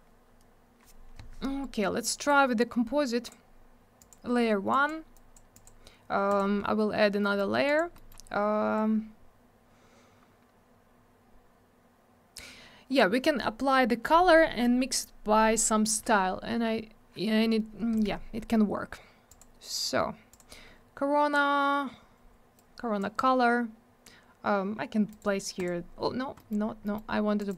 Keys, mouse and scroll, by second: 2.3 click, 4.0 click, 4.1 click, 4.7 click, 4.9 click, 5.1 click, 5.5 click, 5.6 click, 6.3 click, 6.4 click, 7.2 middle click, 7.4 middle click, 7.7 click, 7.8 double click, 7.9 middle click, 8.1 middle click, 8.8 scroll up 1, 19.3 click, 19.4 click, 20.3 click, 20.4 click, 22.6 click, 25.1 right click, 25.2 right click, 25.6 click, 25.6 double click, 26.4 middle click, 26.5 middle click, 26.6 scroll down 1, 26.8 middle click, 26.9 double middle click, 27.1 scroll up 1, 27.4 click, 27.5 click, 27.5 click.